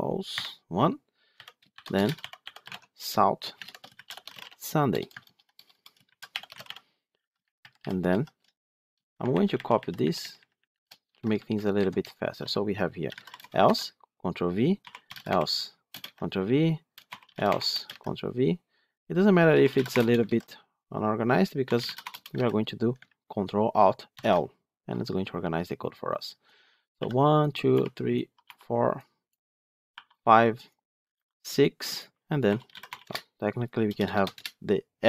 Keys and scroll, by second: 2.6 Tab, 5.1 ctrl+BackSpace, 9.2 ctrl+shift+Left, 10.9 ctrl+c, 13.5 ctrl+v, 24.0 ctrl+alt+l.